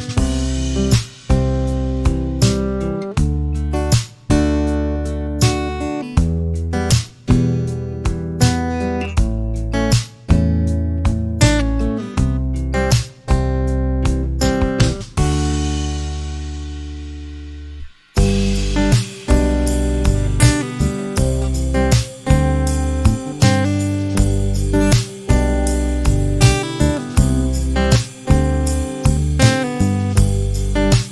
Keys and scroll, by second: 2.1 p, 3.1 1, 3.5 Return, 4.3 space, 6.4 Delete, 8.4 t, 10.1-11.1 typing, 14.5 3, 14.9 0, 18.1 r, 18.9 space, 23.5 p, 25.0 5, 25.4 Return, 26.0 space.